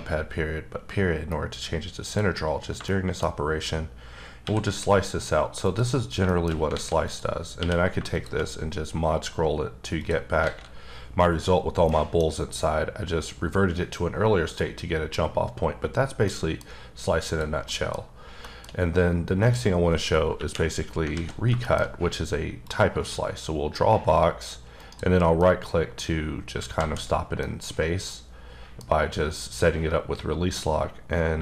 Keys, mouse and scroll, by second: 2.8 shift+middle click, 4.4 x, 5.6 click, 6.3 shift+middle click, 6.7 alt+a, 7.0 click, 7.6 q, 8.1 shift+click, 8.5-9.4 scroll up 8, 10.0 click, 10.4 alt+a, 11.9 middle click, 14.6 middle click, 16.2 middle click, 17.2 click, 17.7 middle click, 18.8 scroll up 1, 19.4 click, 20.3 KP_1, 21.1 alt+z, 21.6-21.9 shift+scroll up 3, 22.6 click, 24.8 right click, 25.4 middle click, 26.0 scroll down 3, 26.7 alt+z, 27.4-28.9 middle drag, 31.3 shift+middle click.